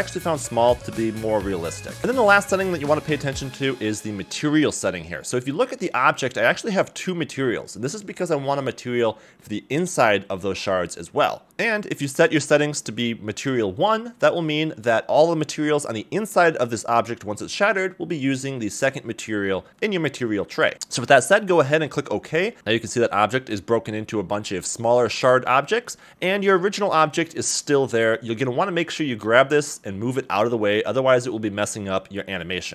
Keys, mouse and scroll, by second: 6.6 click, 7.5 click, 7.8 click, 8.1 click, 8.4 click, 8.8 click, 11.8 click, 12.3 click, 12.7 click, 13.6 click, 13.8 click, 14.2 click, 14.6 click, 14.9-19.2 drag, 25.4 middle drag, 25.4 scroll down 1, 25.5 click, 26.0 click, 26.5 click, 27.4 click, 28.9 g, 30.8 Escape, 31.1 scroll down 3, 31.4 g, 32.1 click.